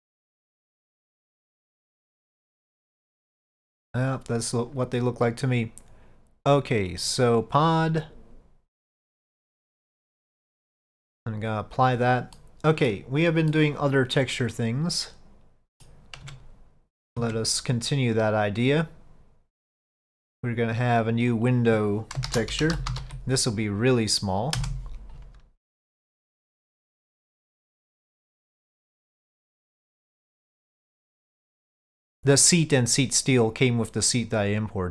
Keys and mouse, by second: 1.0 click, 1.4-1.9 middle drag, 2.2-2.6 middle drag, 9.6-12.0 drag, 12.4-13.0 middle drag, 13.6-15.9 middle drag, 16.3 Tab, 17.1 middle click, 17.5 Tab, 18.1 click, 19.8 click, 20.9 click, 21.4 click, 21.6-25.4 drag, 25.7-26.0 middle drag, 26.6-28.7 drag, 29.2 middle click, 30.3-34.9 drag.